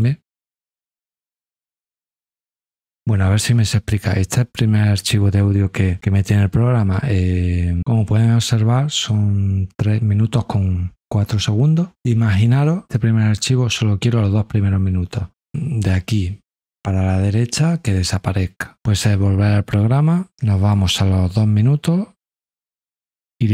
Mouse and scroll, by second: 20.7-23.3 drag.